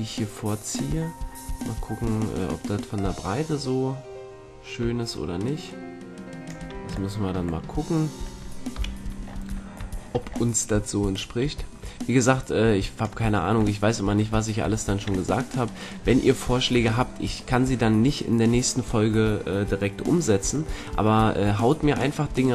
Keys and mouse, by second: 2.0 middle click, 2.9-5.9 drag, 7.1-11.0 middle drag, 8.7 KP_1, 11.0-12.9 drag, 13.5-16.7 middle drag, 16.0 a, 16.7 Tab, 20.7-22.5 middle drag.